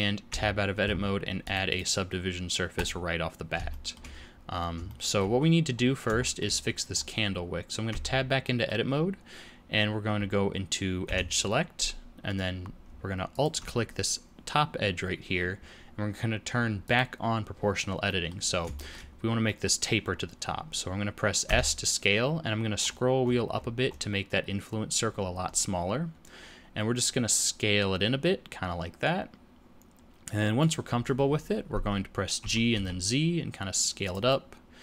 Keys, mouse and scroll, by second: 0.0 scroll up 5, 0.2 Tab, 1.4 click, 1.6 click, 3.6 shift+scroll up 1, 3.8 shift+middle click, 4.1-4.5 scroll down 3, 4.8 shift+middle click, 5.3-6.0 scroll up 5, 6.2 shift+middle click, 6.9-7.8 scroll up 2, 7.8 Tab, 8.4 middle click, 11.0 2, 13.3 alt+click, 16.8 click, 18.0 middle click, 18.4 scroll down 3, 18.7 shift+middle click, 19.0-19.4 scroll up 2, 19.4 middle click, 21.4 s, 32.4 g, 34.2 middle click.